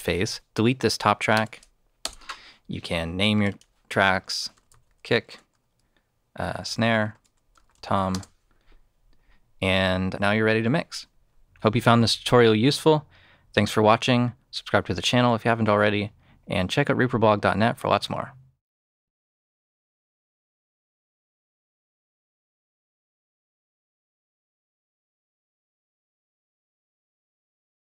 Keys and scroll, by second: 1.3 BackSpace, 1.9 Return, 4.1-5.1 typing, 5.2 Tab, 6.2-8.2 typing, 7.1 Tab.